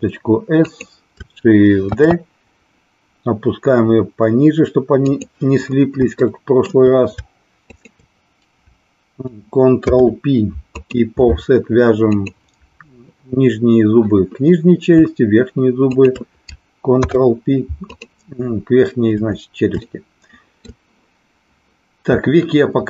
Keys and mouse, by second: 0.6 click, 1.8 shift+d, 6.4 shift+middle click, 7.6 shift+click, 9.8 ctrl+p, 12.1 click, 15.7 shift+click, 16.9 ctrl+p, 19.8 shift+middle click.